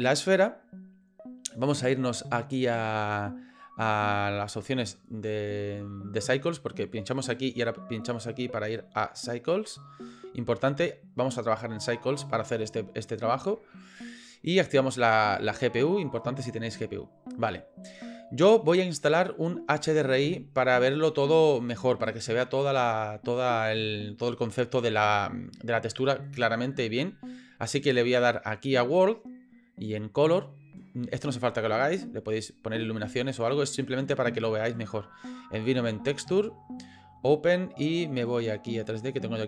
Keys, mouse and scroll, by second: 5.4 click, 8.1 click, 8.8-9.7 drag, 14.4-15.2 drag, 19.3 click, 30.4-35.5 drag, 36.8 click.